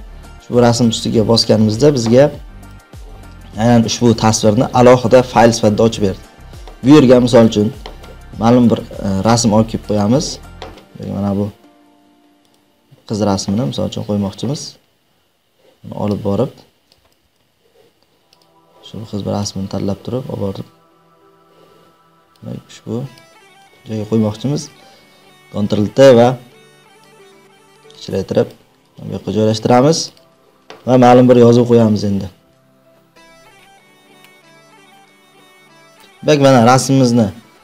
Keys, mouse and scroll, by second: 2.7 click, 5.4 click, 9.9 click, 12.5 click, 16.8 click, 17.3 ctrl+z, 18.4 click, 22.3 click, 23.5 click, 28.8 click, 30.1 click, 32.2-34.0 typing, 34.1 click, 34.3 click, 34.9 click, 35.7 click, 35.9 click.